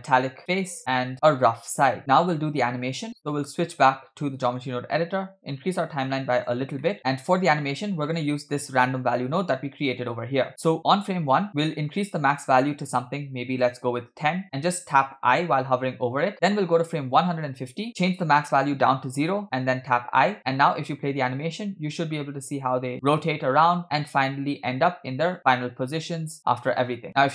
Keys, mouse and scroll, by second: 1.1 middle click, 3.4-4.7 drag, 5.9 click, 6.8 middle click, 8.1-8.8 middle drag, 9.3 click, 9.8 click, 12.0-13.7 shift+drag, 15.2 i, 17.3 click, 17.9 Left, 18.1-19.3 shift+drag, 19.9 i, 20.8 space, 26.6 space.